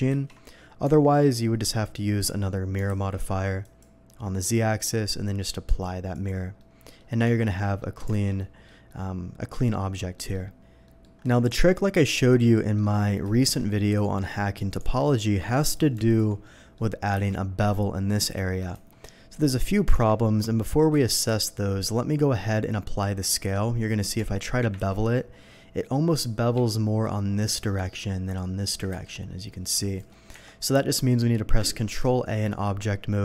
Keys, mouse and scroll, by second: 0.1 ctrl+z, 0.8 Tab, 1.1 middle click, 2.2 click, 2.9 alt+x, 3.6 click, 5.6 click, 6.1 click, 6.6-7.0 middle drag, 7.2 Tab, 7.6 middle click, 8.1 alt+a, 8.4 middle click, 8.9-9.9 middle drag, 10.1 middle click, 10.8 middle click, 12.5 middle click, 13.3 shift+middle click, 14.0 shift+middle click, 14.8 Tab, 15.6 click, 16.1 alt+click, 16.4 alt+middle click, 18.7 Escape, 19.9 Tab, 20.9 n, 24.2 Tab, 25.0 Tab, 25.0 ctrl+b, 26.5 Escape, 28.9 ctrl+b, 30.0 Escape, 30.3 Tab, 32.0 ctrl+a.